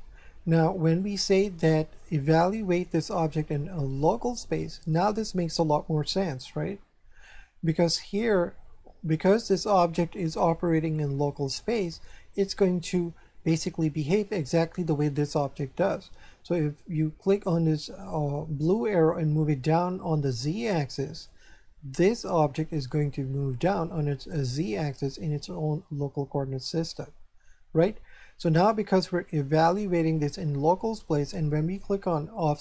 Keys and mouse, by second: 1.0 click, 4.0 click, 15.0 right click, 18.6 click, 22.1 right click, 32.3 click.